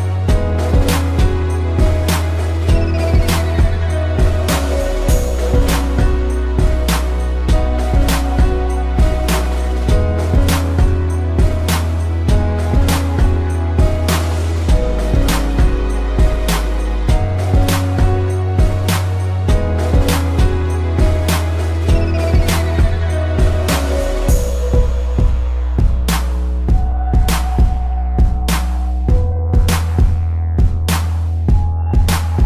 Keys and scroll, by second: 1.4 space, 5.8 space, 9.7 space, 13.6 space, 18.9 space, 25.9 space.